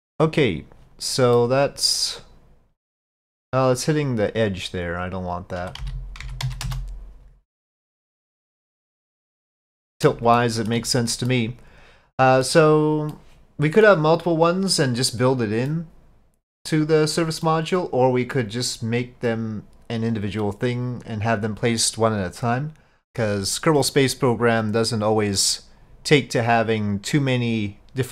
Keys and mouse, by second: 1.4-5.6 middle drag, 5.6-7.3 drag, 7.7-10.1 middle drag, 10.4-10.8 shift+middle drag, 11.4-12.5 middle drag, 13.1-14.0 middle drag, 15.7-16.7 drag, 17.5-18.5 drag, 25.7-27.4 drag.